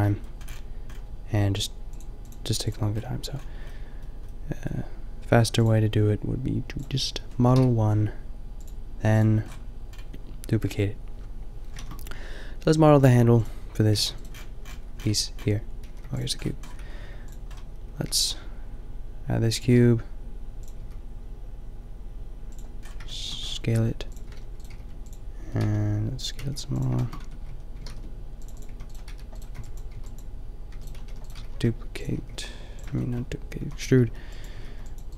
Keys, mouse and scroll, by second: 6.8 click, 7.5 KP_5, 9.4-9.8 middle drag, 11.8 shift+a, 13.9 g, 14.2-15.9 middle drag, 15.9 g, 16.5 middle click, 16.7 s, 18.0 g, 19.6 g, 20.8 s, 22.9 click, 23.8-26.3 typing, 24.6 middle click, 27.1 Tab, 27.5 a, 27.9 ctrl+r, 28.6-32.2 typing, 33.0 click, 33.6 a, 34.1 b, 34.5 g.